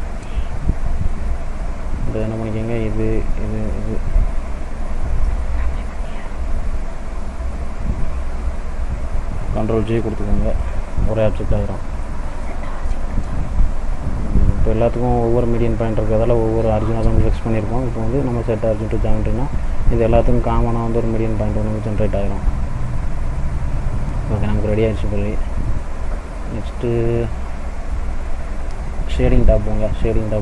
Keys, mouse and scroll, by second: 1.2 click, 2.8 shift+click, 3.4 shift+click, 10.1 ctrl+j, 11.8 middle click, 12.4 click, 13.7 right click, 21.0 click, 22.1 middle click, 22.5-23.2 scroll down 2, 23.2 middle click, 23.2-23.7 scroll down 1, 23.7 scroll up 1, 24.5 middle click, 25.5 middle click.